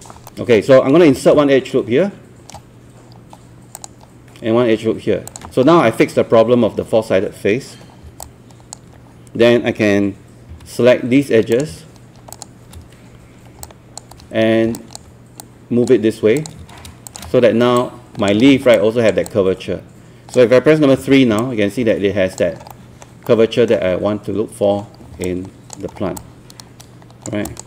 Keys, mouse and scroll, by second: 0.3 alt+middle click, 1.8 shift+right click, 3.8 ctrl+click, 5.3 ctrl+click, 5.6 scroll down 1, 5.8-6.9 scroll up 1, 8.2 alt+click, 10.5 w, 11.5 click, 12.4 shift+click, 13.7 alt+click, 14.8-16.4 alt+drag, 17.1 shift+click, 18.6 alt+scroll down 1, 18.8 click, 19.3 alt+click, 21.0 alt+3, 21.4 alt+click, 22.6 alt+scroll down 1, 22.7 alt+middle click, 23.2 alt+middle click, 24.6 scroll down 1, 25.2 alt+click, 26.0 scroll up 1, 26.2 alt+click, 27.5 alt+click.